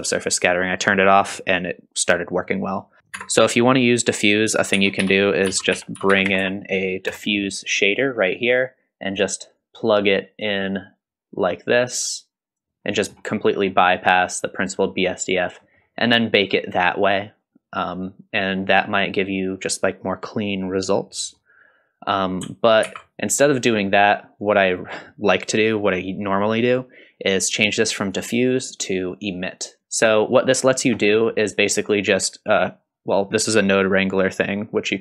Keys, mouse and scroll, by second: 1.0-2.1 drag, 3.0 click, 3.0 shift+a, 3.0 s, 3.0 BackSpace, 4.7 shift+a, 6.1 f, 9.6-10.6 drag, 11.8-12.6 drag, 12.9 middle click, 15.6 middle click, 16.2 click, 22.1 click, 22.9 ctrl+x, 24.4-24.9 drag, 28.1-29.8 drag, 31.1 middle click.